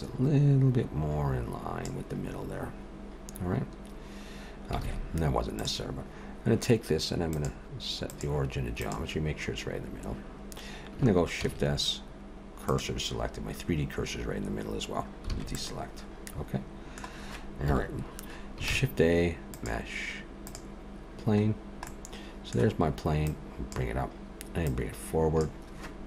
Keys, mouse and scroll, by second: 4.8 alt+a, 5.6 click, 7.3 click, 11.4 shift+s, 15.3 alt+a, 15.5 middle click, 17.7 KP_7, 18.7 shift+a, 21.6 scroll down 1, 21.9 middle click, 23.3 click, 24.7 click.